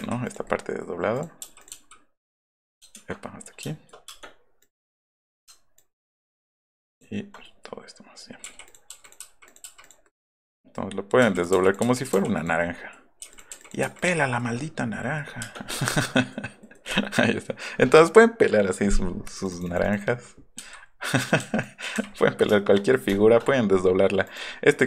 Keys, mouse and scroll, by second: 0.4 middle click, 1.1 click, 1.4 u, 1.6 click, 1.7 u, 2.9 ctrl+z, 3.8 middle click, 4.0 space, 4.6 click, 5.8 ctrl+drag, 6.7 ctrl+click, 8.4 o, 8.6-9.5 scroll up 3, 8.9 o, 9.2 o, 9.6 o, 10.0 middle click, 11.2 p, 11.3 click, 11.5 p, 11.6 click, 12.0 click, 12.3 click, 13.2 o, 13.3 click, 13.6 click, 13.8 o, 14.0 click, 14.3 scroll down 1, 14.6 middle click, 15.0 middle click, 15.3 middle click, 15.7 middle click, 15.9 click, 16.1 middle click, 16.5 middle click, 16.9 shift+middle click, 19.4 click, 19.5 click, 19.7 click, 19.8 click, 21.0 click, 21.6 click, 24.2 click.